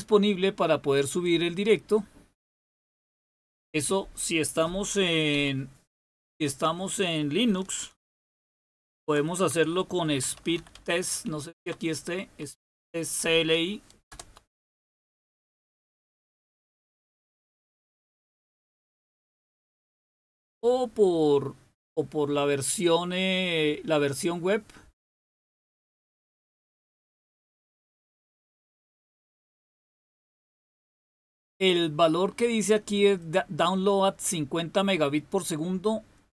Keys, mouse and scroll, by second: 5.3 typing, 6.2 click, 8.6 ctrl++, 8.8 ctrl++, 9.5-12.4 typing, 12.7 Tab, 14.1 Return, 16.1-16.8 typing, 33.1-35.4 drag.